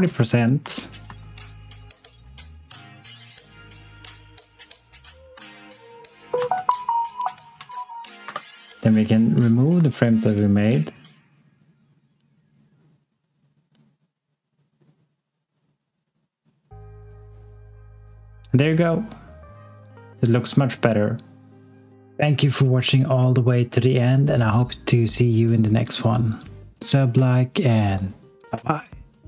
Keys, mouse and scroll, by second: 0.6 s, 1.0 x, 7.6 click, 8.2 f, 9.2 click, 9.7 x.